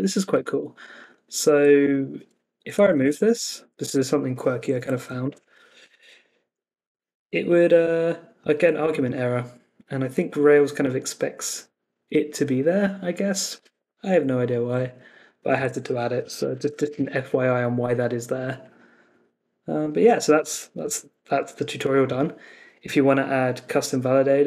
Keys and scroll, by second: 2.9 super+s, 3.8 super+Tab, 4.9 Up, 5.2 Return, 15.5 super+Tab, 16.8 super+s.